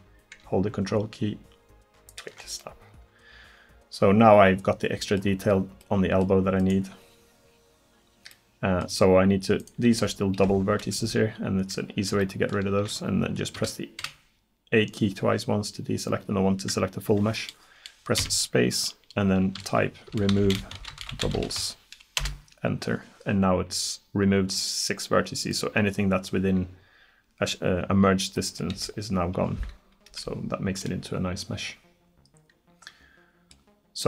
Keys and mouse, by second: 3.7 click, 3.9 click, 4.6-5.9 middle drag, 5.9 click, 6.6-8.5 right drag, 10.0 g, 12.3 click, 13.6 a, 14.0 a, 18.2 space, 28.5 right click, 28.8 g, 32.7 right click.